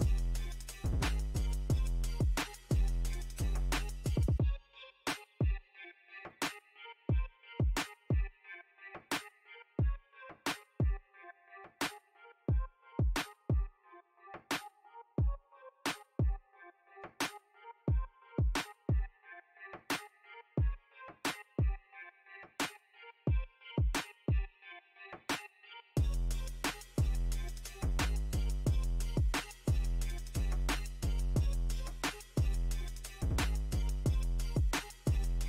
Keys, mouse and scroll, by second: 0.2 ctrl+click, 1.0-3.1 middle drag, 3.1 ctrl+r, 3.6 middle click, 4.3-6.4 drag, 6.4 middle click, 6.7-9.1 drag, 9.1 ctrl+middle click, 9.6 ctrl+click, 10.1 middle click, 10.6-11.6 ctrl+drag, 11.6 middle click, 12.0-13.3 drag, 13.3 middle click, 13.8 ctrl+click, 14.5 middle click, 14.9 click, 15.8 middle click, 16.3-17.4 drag, 17.4 middle click, 17.7-18.9 drag, 18.9 middle click, 19.3-20.5 drag, 20.5 middle click, 20.9-22.8 drag, 22.8 middle click, 23.1 click, 24.1 middle click, 24.5 click, 25.1 middle click, 26.0 ctrl+click, 26.3-27.4 middle drag, 27.4 ctrl+click, 27.9-29.3 ctrl+middle drag, 29.3 g, 29.9 f, 31.4-32.5 drag, 32.5 f, 33.3 click, 34.3 middle click, 34.8 click, 35.2-35.4 middle drag.